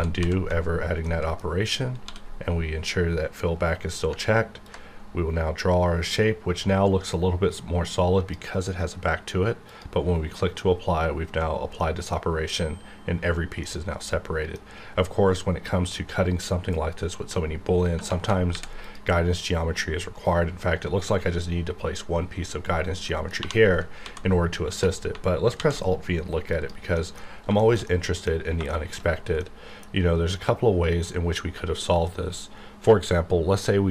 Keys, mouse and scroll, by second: 1.0 middle click, 1.7 scroll down 1, 2.0 d, 4.6-9.7 ctrl+drag, 11.8 middle click, 12.2 scroll up 1, 13.6 middle click, 13.6-16.7 middle drag, 18.5 ctrl+r, 18.8 click, 20.0 click, 20.1 right click, 23.1 middle click, 23.4 2, 24.0 ctrl+x, 25.6 alt+v, 26.5 click, 26.9 middle click, 27.3 scroll up 1, 27.6 shift+middle click, 28.3 scroll up 1, 28.7 shift+middle click, 29.0-29.4 scroll up 1, 29.4-33.7 middle drag.